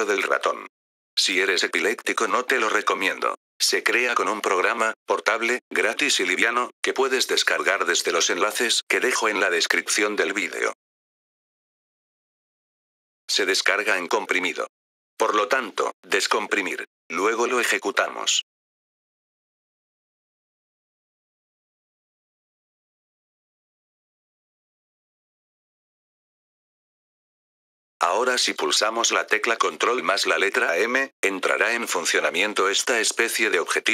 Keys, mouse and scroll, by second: 12.7 F3, 13.0 click, 17.8 right click, 20.2 click, 26.8 F3, 27.5 click.